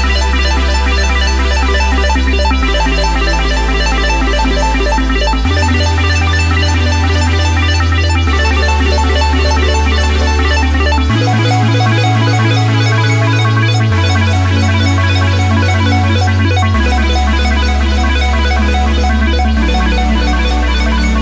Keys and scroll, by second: 4.6 ctrl+g, 6.6-9.6 typing, 11.9 ctrl+c.